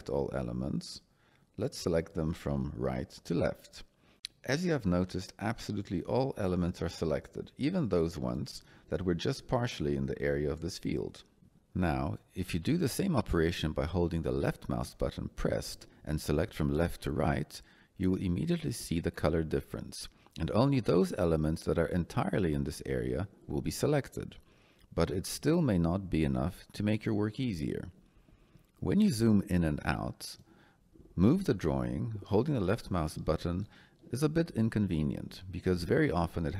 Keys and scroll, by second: 13.1 Escape, 26.0 Escape.